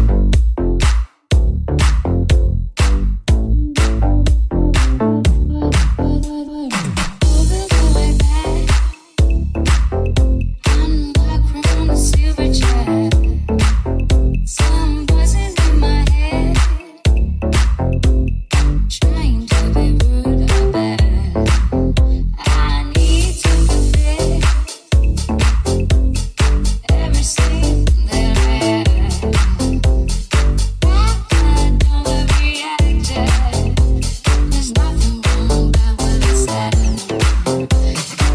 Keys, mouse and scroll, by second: 2.5 Tab, 3.1 ctrl+Tab, 5.0 click, 5.0 middle click, 5.0 right click, 5.9 alt+h, 6.1-9.6 shift+drag, 6.8 middle click, 6.8 right click, 7.7 middle click, 7.7 right click, 9.6-12.5 middle drag, 12.5 click, 12.6 w, 13.6 click, 14.0 shift+s, 15.5-19.0 middle drag, 19.0 right click, 19.1-20.8 middle drag, 19.4 shift+Tab, 20.8 right click, 20.9-22.7 middle drag, 21.3 g, 22.7 right click, 22.8 alt+middle click, 23.4 alt+right click, 23.4-25.7 alt+middle drag, 24.0 g, 25.0 Tab, 25.7 right click, 25.7-28.9 middle drag, 26.7 Tab, 28.9 ctrl+shift+s, 29.2 middle click, 29.5 middle click, 29.7 shift+middle click, 30.2-32.1 ctrl+middle drag, 32.9-36.1 shift+middle drag, 36.1 middle click, 37.9 middle click.